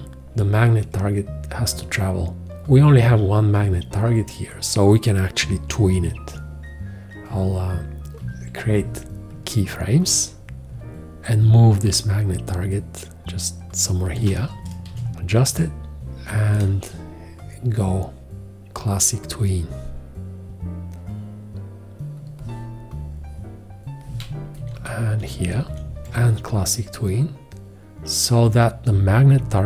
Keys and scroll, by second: 6.0 x, 8.2 x, 14.9 v, 15.1 Left, 16.6 4, 24.6 Right, 26.0 4.